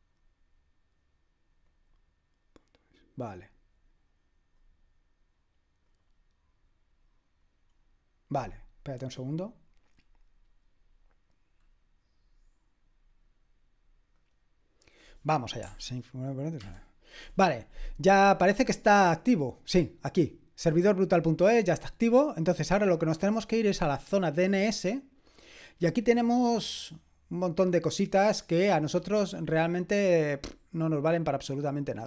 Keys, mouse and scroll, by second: 1.6 click, 4.8-5.9 scroll down 1, 5.9 click, 9.1 click, 10.7 click, 14.1 click, 16.7 super+/, 24.2 click, 25.6-26.5 scroll down 2, 26.5-30.3 scroll down 1, 30.3-32.0 drag.